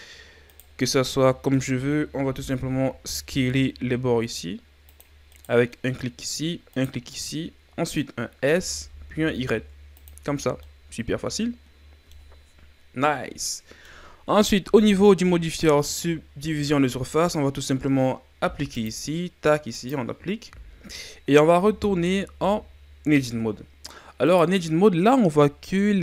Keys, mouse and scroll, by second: 0.5 shift+right click, 0.8-2.2 middle drag, 2.2 s, 5.3 right click, 5.8 middle click, 6.7 shift+right click, 7.1-8.6 middle drag, 8.6 s, 10.2 Tab, 10.6 scroll up 1, 10.6-16.6 middle drag, 18.7-21.0 drag, 21.0 middle click, 21.4 Tab, 24.3 right click, 25.9 ctrl+a.